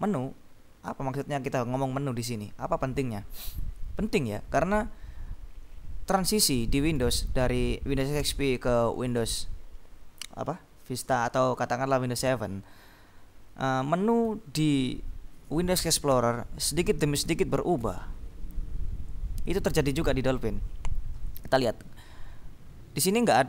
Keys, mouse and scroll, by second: 3.6 click.